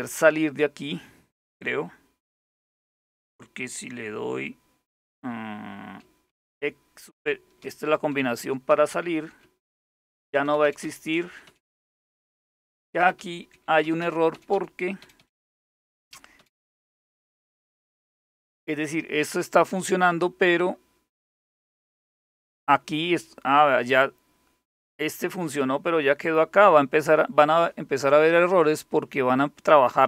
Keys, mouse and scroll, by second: 5.9 super+x, 7.3 super+x, 8.0 super+x, 8.3 super+x, 8.5 super+x, 9.5 super+x, 10.3 super+x, 10.5 super+x, 11.3 super+x, 11.5 super+x, 11.9 super+x, 12.5 super+x, 12.6 super+x, 13.5 super+x, 13.7 super+x, 14.7 super+x, 14.8 super+x, 15.3 super+x, 15.5 super+x, 16.2 super+x, 16.5 super+x, 17.4 super+x, 17.6 super+x, 21.7 click, 26.6 click, 28.1 click.